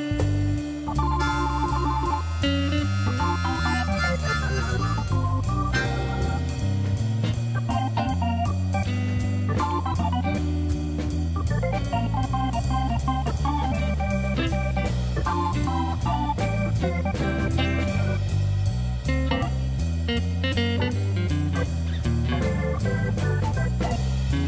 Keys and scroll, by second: 2.4 e, 5.5 shift+s, 8.7 Tab.